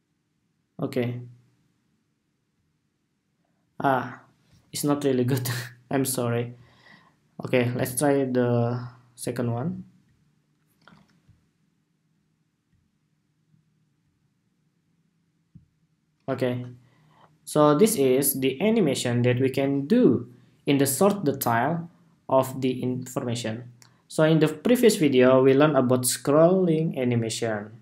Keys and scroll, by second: 19.2 super+s.